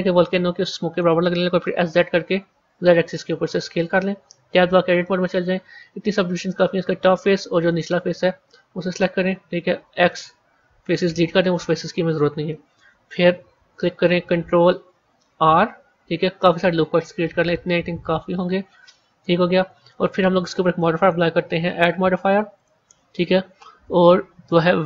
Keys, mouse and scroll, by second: 1.3 s, 4.4 Tab, 4.9-6.3 middle drag, 6.3 click, 7.0-8.8 middle drag, 8.8 shift+click, 9.7 x, 11.7 KP_1, 13.2 KP_3, 15.3 ctrl+r, 19.5 Tab, 20.9 click, 22.5-24.8 drag.